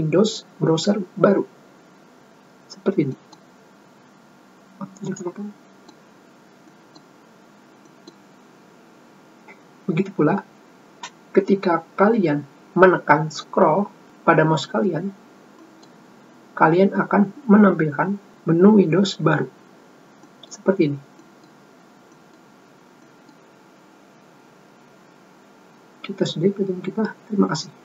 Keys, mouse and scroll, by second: 5.7 click, 6.4 middle click, 7.4 middle click, 8.6 middle click, 20.9 middle click, 21.9 middle click, 22.8 middle click, 23.7 middle click.